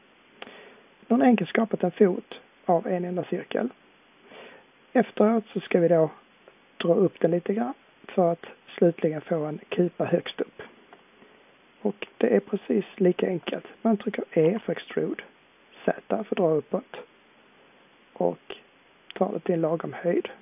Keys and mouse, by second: 14.4 e.